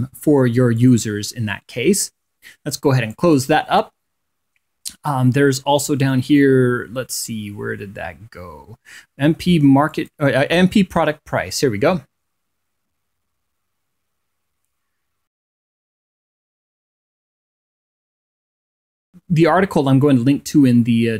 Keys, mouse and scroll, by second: 0.3 click, 1.5 click, 3.9 click, 10.7 click, 15.1-15.5 scroll down 2, 16.3 scroll down 1.